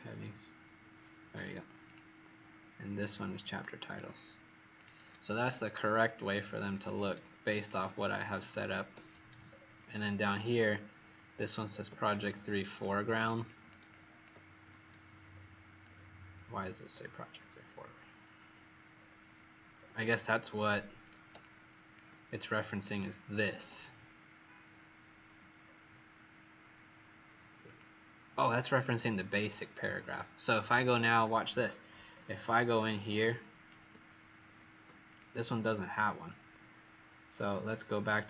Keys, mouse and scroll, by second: 1.7 click, 3.7 click, 5.6-6.7 alt+scroll down 1, 18.9-19.7 scroll up 2, 19.7 scroll down 2, 20.5-21.2 alt+scroll up 1, 22.7 click, 25.6-27.6 alt+scroll down 1, 27.6 click, 32.0-33.0 alt+scroll up 4, 33.1 click.